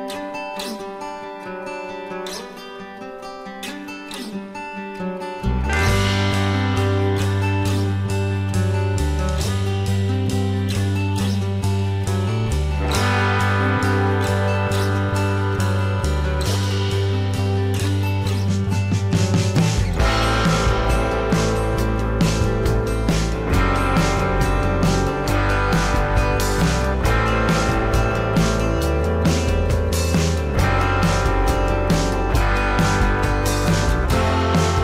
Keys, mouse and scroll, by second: 2.7 alt+click, 6.4 alt+scroll down 1, 6.7 space, 7.5 alt+scroll up 1, 13.0 alt+scroll up 1, 14.3 alt+click, 19.3 Delete, 20.5 alt+click, 23.2 alt+scroll down 1, 23.3 space, 25.4 ctrl+d, 29.0 alt+scroll up 1, 31.7 alt+click.